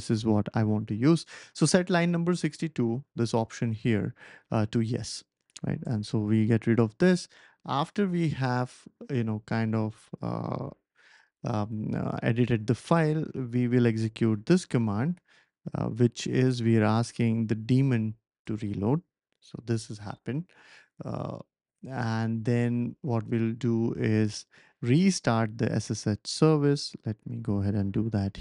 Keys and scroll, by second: 5.8 Return, 11.1 super+c, 13.4 ctrl+shift+v, 14.4 Left, 14.9 Left, 15.0 Left, 15.1 Left, 15.2 Left, 15.3 Left, 16.8 BackSpace, 17.0 BackSpace, 17.1 BackSpace, 17.2 BackSpace, 18.4 Return, 24.5 super+c, 26.7 ctrl+shift+v, 27.3 Left, 27.8 Left, 27.9 Left, 28.0 Left, 28.0 Left, 28.1 Left.